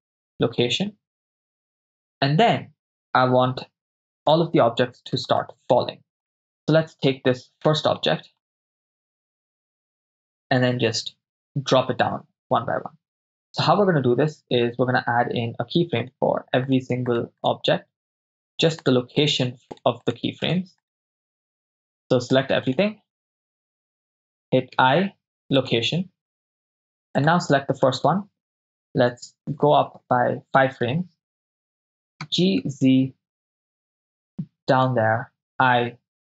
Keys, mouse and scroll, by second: 4.4 KP_0, 5.6-6.3 middle drag, 6.3 right click, 7.3-8.1 ctrl+middle drag, 8.4-9.0 shift+middle drag, 16.2 shift+click, 16.2 shift+right click, 16.8-20.5 shift+drag, 16.8 shift+right click, 17.2 shift+right click, 17.5 shift+right click, 18.2 shift+right click, 18.9 shift+right click, 19.8 shift+right click, 20.5 shift+right click, 20.9 shift+right click, 21.3-22.1 shift+right drag, 22.5-22.8 shift+right drag, 24.0 shift+right drag, 24.7 i, 27.5 click, 27.5 right click, 29.7 Right, 29.8 Right, 29.9 Right, 30.0 Right, 30.1 Right, 32.2 g, 32.7 z, 34.8-35.2 ctrl+drag, 35.6 i.